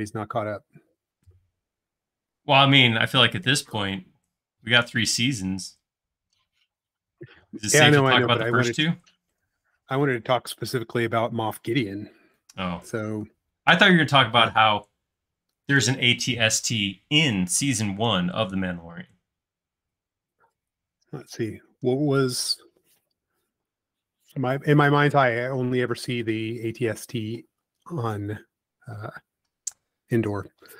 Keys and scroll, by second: 23.5 c, 27.9 space, 30.6 |.